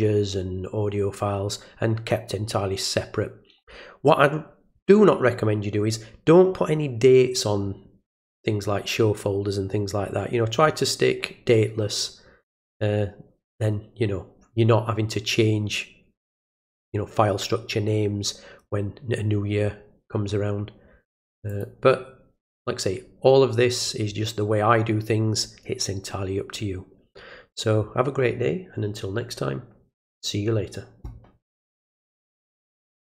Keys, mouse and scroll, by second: 21.5 click, 32.1 click, 33.1 click.